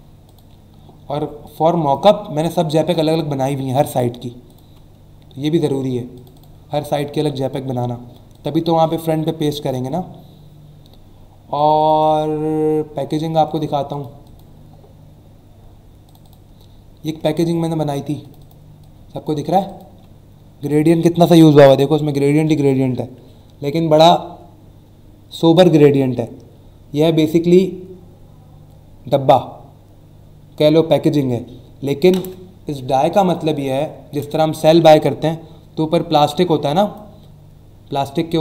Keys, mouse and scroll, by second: 0.2 click, 0.4 click, 1.4 click, 1.8 click, 2.4 click, 4.5 click, 4.7 click, 6.1 click, 8.3 click, 8.5 click, 9.4 BackSpace, 11.5 click, 13.4 right click, 13.9 click, 14.2 click, 16.0 click, 18.2 click, 18.8 click, 33.2 click, 33.7 click, 36.6 click.